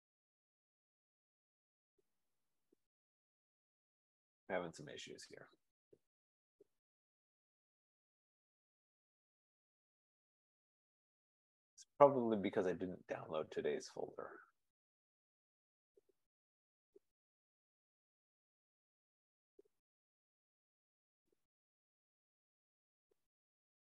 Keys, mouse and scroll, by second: 10.4-14.4 drag, 16.7 click, 16.8 click, 18.2 click, 18.3 click, 20.4 click, 20.9 right click, 22.7 click.